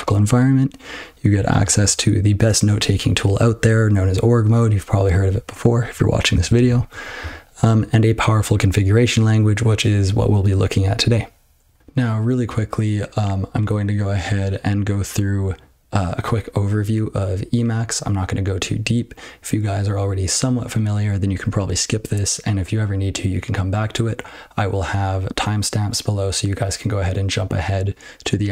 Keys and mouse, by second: 1.5 click, 1.5 click, 6.4 ctrl+n, 6.6 ctrl+n, 6.8 ctrl+p.